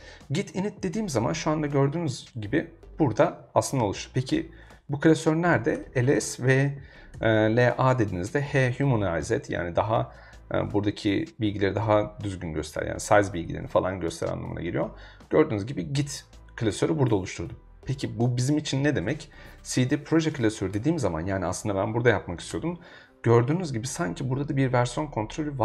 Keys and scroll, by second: 5.3-7.0 typing, 7.1 Return, 19.0-20.6 typing, 20.7 Return, 22.0 g, 22.5 BackSpace.